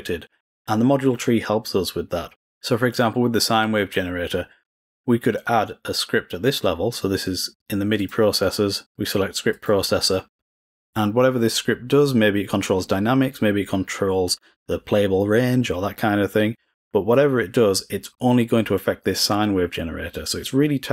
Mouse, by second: 7.9 click, 9.5-9.8 drag.